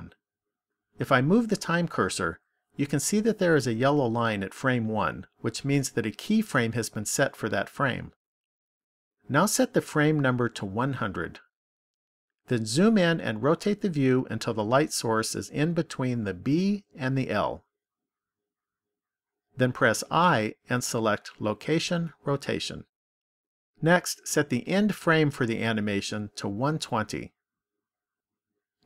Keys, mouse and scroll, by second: 1.1 click, 9.7 click, 11.0 KP_0, 13.5-15.4 scroll up 4, 15.4 middle click, 20.1 i, 25.5 click.